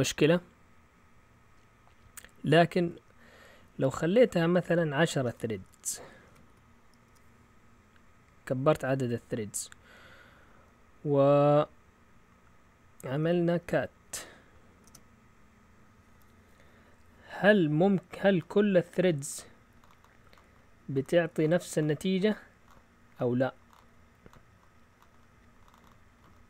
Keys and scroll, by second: 3.6 Left, 4.2 Left, 4.3-7.1 typing, 14.1-14.8 typing.